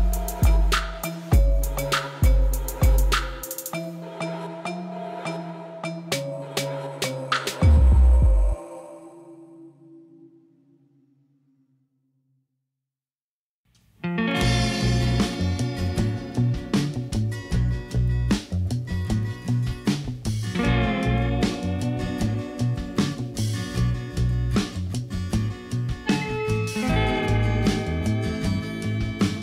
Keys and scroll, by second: 0.2 Return, 1.9 e, 2.2 z, 6.4 ctrl+r, 8.8 1, 9.0 5, 9.6 Return, 13.6 3, 14.6 a, 17.9 s, 18.6 shift+x, 23.1 Tab, 29.0 shift+s.